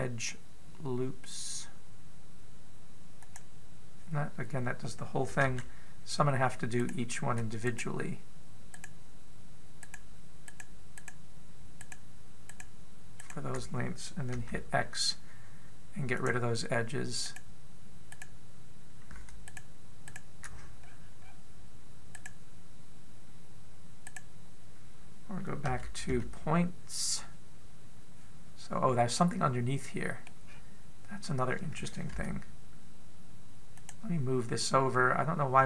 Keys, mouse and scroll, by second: 6.2 a, 7.6 right click, 8.4 shift+right click, 9.5 right click, 10.6 right click, 11.3 shift+right click, 11.7 shift+right click, 12.6 shift+right click, 13.2 shift+right click, 14.0 shift+right click, 15.1 x, 18.1 right click, 18.9 right click, 20.3 shift+right click, 20.9 shift+right click, 21.6-22.4 scroll up 5, 22.9 right click, 24.8 right click, 26.5 a, 26.9 a, 29.9 middle click, 31.3-33.0 scroll down 4, 33.0 g.